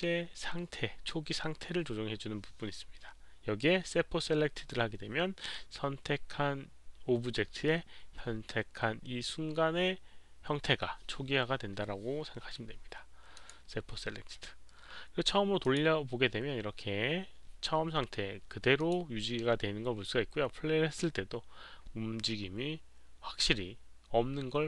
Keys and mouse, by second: 3.5 click, 13.3 click, 15.6 click, 18.7 click, 23.1 click, 24.2 click.